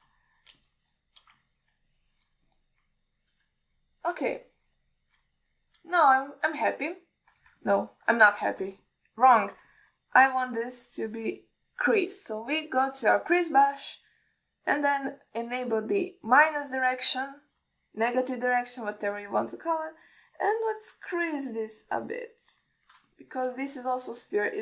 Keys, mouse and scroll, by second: 0.8 shift+click, 1.4 alt+middle click, 1.9 shift+click, 2.7 alt+middle drag, 3.2-3.5 ctrl+alt+middle drag, 3.7 middle drag, 4.6 KP_1, 5.6-6.2 ctrl+alt+middle drag, 7.3 alt+shift+middle click, 8.0 ctrl+alt+middle click, 8.9 ctrl+middle click, 9.7 ctrl+alt+middle click, 10.1 middle click, 10.7 ctrl+alt+middle click, 11.0 middle click, 11.7 shift+click, 14.3 click, 18.3 alt+middle click, 19.7 KP_1, 20.4 click, 21.7 click, 22.4 alt+middle click, 23.1 click, 24.0 middle click, 24.3 alt+shift+middle click.